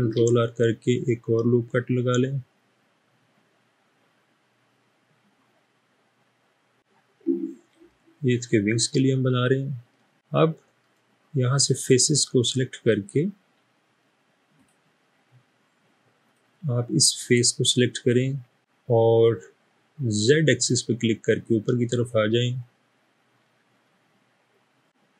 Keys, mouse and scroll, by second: 0.0 ctrl+r, 9.9 middle click, 18.6 n.